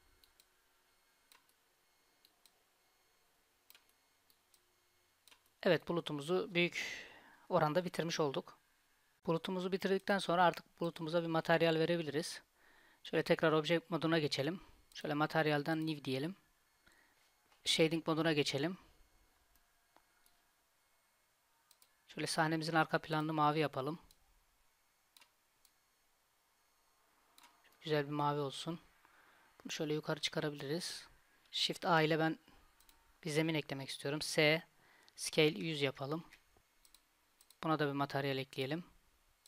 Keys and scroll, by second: 31.8 shift+a, 34.2 s.